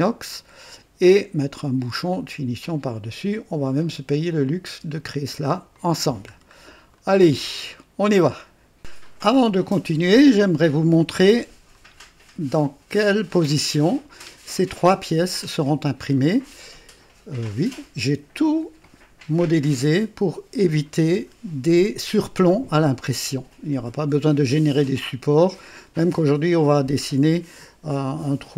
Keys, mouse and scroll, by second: 0.3-1.3 drag, 2.1-3.5 drag, 4.6 space, 5.7 click, 6.3 scroll down 2, 6.9-7.6 right drag, 7.7-8.4 drag, 11.7-14.4 drag, 16.2-25.9 drag.